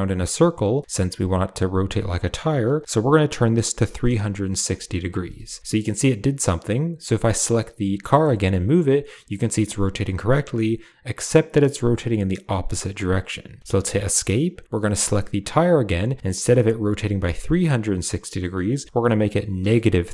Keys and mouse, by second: 7.4 click, 8.1 g, 14.8 click, 16.4-20.0 drag.